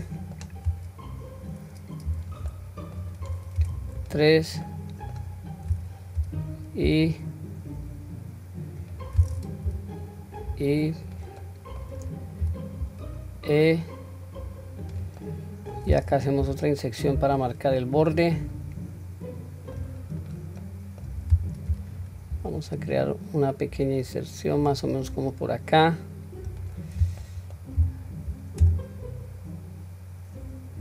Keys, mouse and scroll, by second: 2.1 q, 2.5 middle click, 3.6 3, 4.0 click, 4.7 middle click, 6.2 i, 11.4 middle click, 12.5 e, 15.2 middle click, 16.4 i, 18.3-19.9 middle drag, 20.2 click, 20.6 middle click, 21.7 i, 27.2 middle click, 27.8 e.